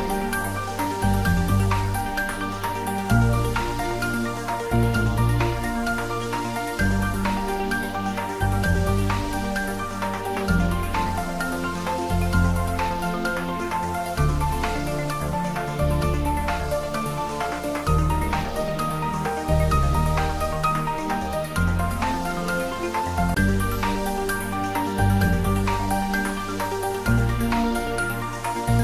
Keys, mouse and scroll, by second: 1.7-4.4 middle drag, 4.4 scroll up 1, 6.7 middle click, 7.9 click, 9.4-10.0 typing, 11.3-12.5 typing, 14.0 Return, 18.3 click, 21.4-22.6 typing, 23.3 Return.